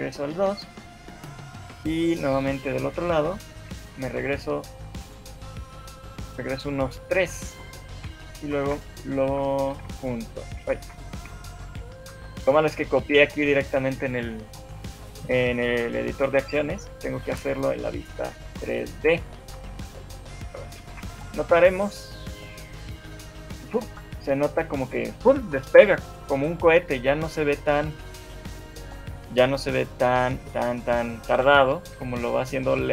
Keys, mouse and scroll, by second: 0.5 ctrl+v, 3.1 right click, 4.1 Left, 4.3 Left, 5.1 Left, 6.1 Right, 8.5 Right, 8.5 ctrl+c, 8.7 Right, 9.5 Left, 9.9 ctrl+v, 10.9 ctrl+z, 13.3 shift+middle click, 13.9 shift+middle click, 16.3 shift+middle click, 18.5 ctrl+c, 18.5 Left, 19.9 ctrl+x, 19.9 Right, 20.5 ctrl+v, 21.1 shift+Left, 22.7 scroll up 1, 22.9 alt+a, 23.9 scroll down 6, 29.9 scroll up 2, 30.3 shift+middle click, 31.5 Escape, 32.5 right click.